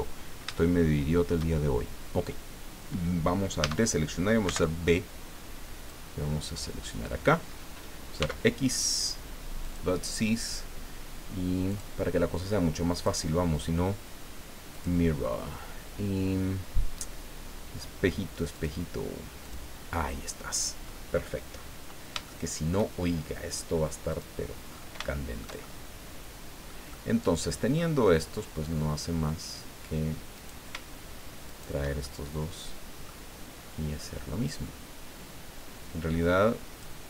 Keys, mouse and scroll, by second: 0.6 shift+click, 1.8 shift+scroll down 3, 3.6 a, 4.4 b, 5.9-7.5 drag, 8.2 x, 9.6 click, 11.7 click, 12.9 click, 14.7 click, 16.8-17.1 scroll down 1, 18.5 click, 19.4 click, 20.7-21.1 scroll up 1, 21.8 scroll down 1, 22.2 shift+middle click, 24.1 click, 24.7 scroll up 2, 25.1-26.8 shift+middle drag, 26.9-27.9 middle drag, 30.3 right click, 31.5 shift+right click, 32.0-33.2 shift+middle drag, 34.5-37.0 drag.